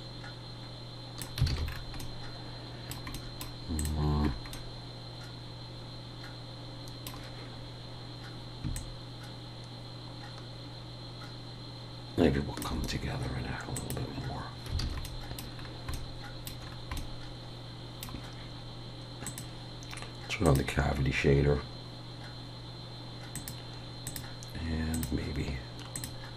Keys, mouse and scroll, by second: 1.5 alt+a, 1.6-2.0 scroll down 3, 2.0 middle click, 3.4-3.8 scroll up 1, 3.8 click, 4.3-4.7 scroll up 2, 4.5 middle click, 8.7 shift+click, 13.7 click, 14.8 alt+a, 15.0 middle click, 15.6-16.1 scroll down 2, 15.9 middle click, 16.6 scroll down 2, 17.0 middle click, 19.2 click, 23.4 click.